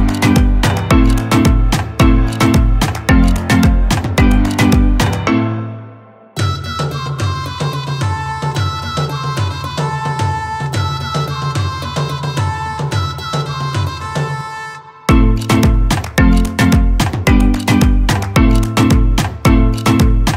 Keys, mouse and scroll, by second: 12.0 alt+scroll down 1, 13.8 ctrl+space, 15.2 click, 16.3 ctrl+space, 16.4 click, 16.9 space.